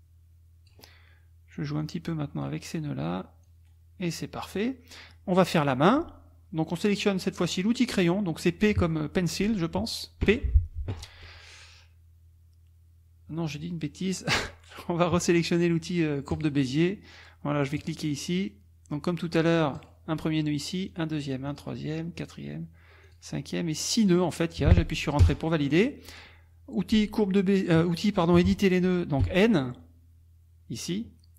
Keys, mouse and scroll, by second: 1.8 click, 3.4 click, 3.7-4.8 scroll down 1, 10.2 p, 16.3 click, 17.8 click, 19.8 click, 20.9 click, 21.5 click, 22.2 click, 23.0 click, 24.1 click, 25.2 Return, 29.2 n.